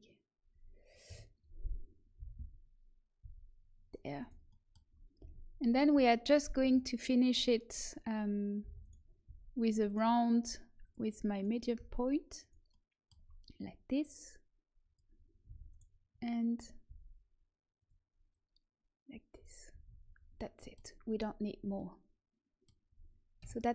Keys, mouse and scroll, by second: 1.0 KP_1, 2.1 g, 5.1 z, 6.5 KP_3, 8.6 e, 9.2 s, 11.7 s, 14.0 click, 15.4 e, 16.8 s, 18.2 click, 19.6 a, 19.8 Tab, 23.3 KP_1.